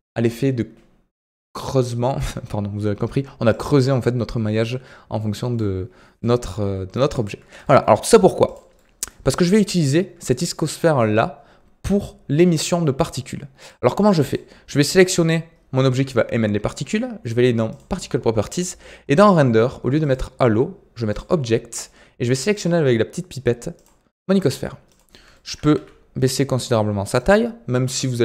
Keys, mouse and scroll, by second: 3.5-5.7 drag, 5.7-6.1 scroll down 5, 6.1-7.2 middle drag, 7.2-7.6 scroll up 2, 7.6-7.9 shift+middle drag, 7.9-8.4 scroll down 3, 8.4 click, 8.7-13.5 middle drag, 13.5 click, 14.2 click, 14.9 click, 17.6 click, 19.9-22.5 drag, 24.4-24.8 scroll up 1, 24.8 click, 25.3-25.7 shift+middle drag, 25.7 s.